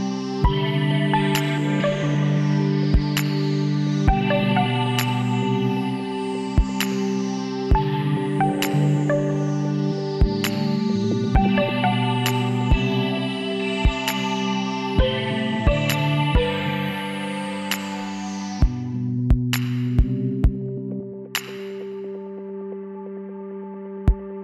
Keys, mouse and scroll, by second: 0.1-3.8 middle drag, 3.8-6.4 right drag, 6.4 middle click, 6.5 KP_1, 10.0-11.4 middle drag, 10.5 e, 13.8 g, 16.4 s, 18.9-24.4 middle drag.